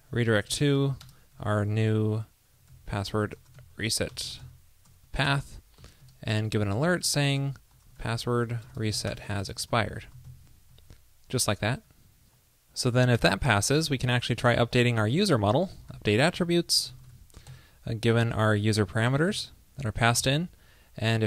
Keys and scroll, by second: 7.4 ctrl+l, 10.8 super+Down, 18.3 ctrl+p, 19.9 super+Right.